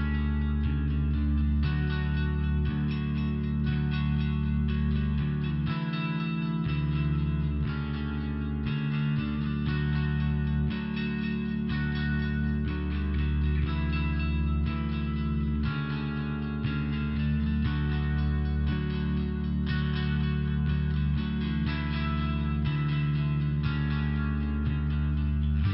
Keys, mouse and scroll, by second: 0.3 click, 0.4 click, 0.9 click, 1.0 click, 1.3 click, 1.4 click, 2.1 click, 2.3 click, 2.8 click, 3.0 click, 3.3 click, 3.5 click, 3.8 click, 4.3 click, 4.5 click, 4.8 click, 5.0 click, 5.9 click, 6.1 click, 6.5 click, 6.6 click, 6.9 click, 7.1 click, 7.4 click, 7.9 click, 8.0 click, 8.4 click, 8.5 click, 9.1 click, 10.4 click, 10.6 click, 11.2 click, 11.3 click, 11.7 click, 12.3 click, 12.5 click, 12.9 click, 13.6 click, 13.7 click, 13.9 click, 14.1 double click, 14.6 double click, 14.7 double click, 15.0 click, 15.1 click, 15.8 click, 15.9 click, 16.4 click, 16.5 click, 17.2 click, 17.3 click, 17.7 click, 17.8 click, 18.3 click, 18.5 click, 18.9 click, 19.0 click, 19.6 click, 20.2 click, 24.1 click, 24.2 click, 25.5 click, 25.6 click.